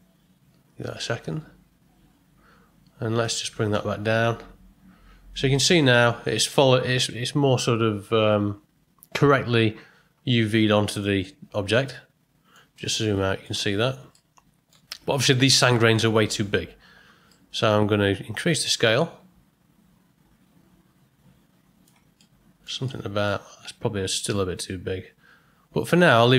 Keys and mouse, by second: 3.3-5.3 drag, 11.2-12.5 middle drag, 12.7-13.1 ctrl+middle drag, 13.2 ctrl+middle click, 14.1-14.7 ctrl+middle drag, 17.4 middle click, 18.7-21.8 drag, 22.2-22.6 middle drag, 22.8-23.2 ctrl+middle drag, 25.9 middle click.